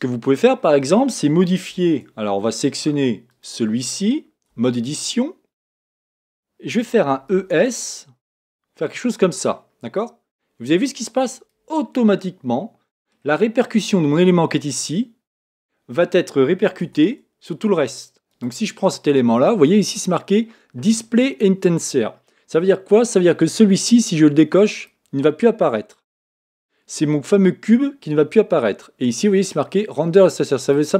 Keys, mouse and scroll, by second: 0.2-1.7 scroll up 4, 1.7 Tab, 3.3 click, 4.5 Tab, 11.7-15.2 scroll down 3, 12.2-15.2 middle drag, 16.8 Tab, 18.3 click, 24.8 click, 25.6-30.7 middle drag, 30.7 click.